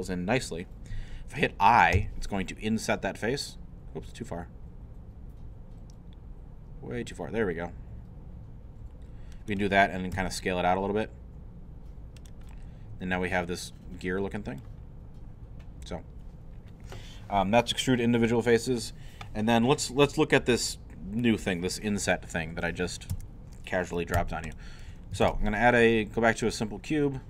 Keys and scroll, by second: 1.9 i, 10.1 s, 23.1 Tab, 24.5-25.8 typing.